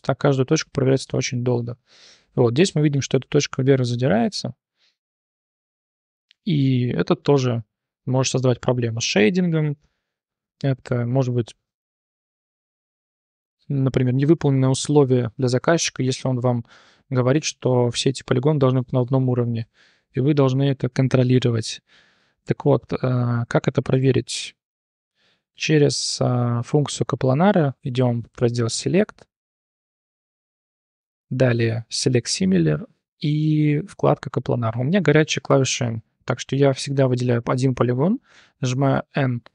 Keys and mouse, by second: 1.0 click, 5.1-5.4 drag, 6.0 t, 6.3 click, 7.1 click, 8.4 click, 9.4 shift+drag, 10.7-11.2 drag, 16.8 3, 17.4 click, 19.7 1, 19.8 click, 20.0 drag, 21.2 click, 22.2 3, 28.2-35.9 drag, 36.1 click, 36.6 3, 36.9 click, 38.3 n.